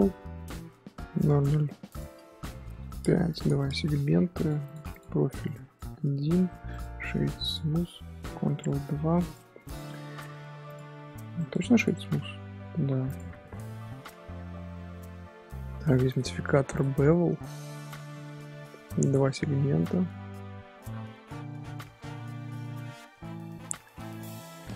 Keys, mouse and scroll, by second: 1.9-6.4 drag, 6.4 middle drag, 6.7-8.8 right drag, 8.8-9.2 middle drag, 9.2 click, 9.7 click, 10.2-10.5 shift+middle drag, 10.5 scroll down 1, 10.6 click, 10.7-11.3 scroll up 1, 11.3-12.1 right drag, 12.1-13.0 middle drag, 13.0 click, 14.5-16.0 middle drag, 16.8-20.0 drag, 20.0-23.1 middle drag.